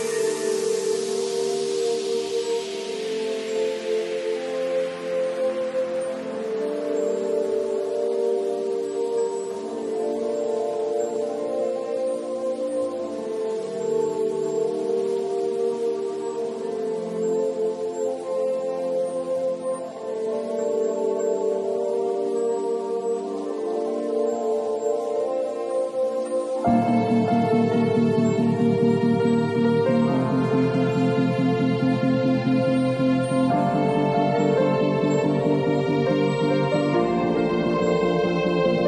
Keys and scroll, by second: 0.2 ], 5.2 0, 18.2 2, 19.9 p, 21.6 b, 28.4 v.